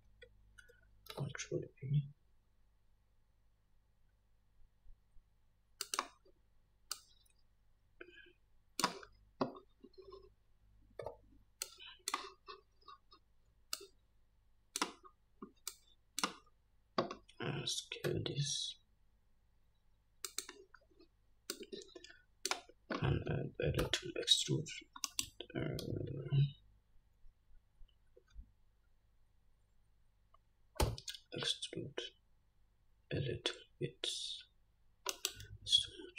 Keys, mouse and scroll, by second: 1.4 ctrl+b, 7.2-20.7 drag, 11.3 1, 18.4 s, 21.8-36.1 drag, 24.1 e, 26.2 ctrl+z, 31.2 e.